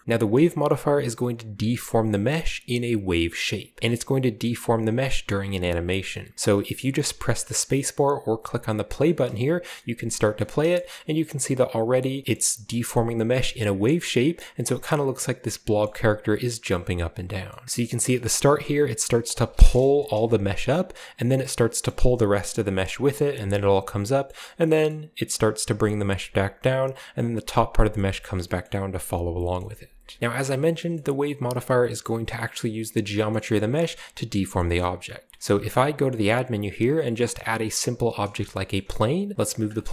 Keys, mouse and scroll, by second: 9.1-9.8 middle drag, 9.2 space, 9.6-10.3 scroll down 1, 10.4 middle drag, 10.8 middle drag, 11.0-11.8 scroll up 1, 11.3 middle click, 12.1-12.8 scroll down 1, 12.7 middle click, 13.5-14.7 middle drag, 14.2-14.7 scroll up 1, 14.8 scroll down 2, 17.6-19.3 drag, 17.6 space, 19.7-20.1 drag, 20.1 Right, 20.3 Right, 21.9-23.2 middle drag, 23.2 Right, 23.4 Right, 23.5 Right, 23.7 Right, 24.3-24.6 middle drag, 24.5-25.2 scroll up 1, 24.9-25.8 middle drag, 25.8 Right, 26.2 Right, 27.7 Right, 27.9 Right, 28.0 Right, 28.3 scroll down 1, 28.4-29.4 middle drag, 29.1 Right, 29.3 Right, 29.6-29.9 middle drag, 29.7 Right, 30.2 space, 30.7-31.5 shift+scroll down 3, 31.0-31.6 middle drag, 32.1-32.8 middle drag, 33.3-34.4 shift+middle drag, 33.9 space, 34.6-36.5 shift+middle drag, 35.6 a, 37.9 click, 38.6-39.3 shift+scroll down 1, 38.8 shift+middle click, 38.9 g, 39.5-39.9 drag, 39.8-39.9 scroll up 2.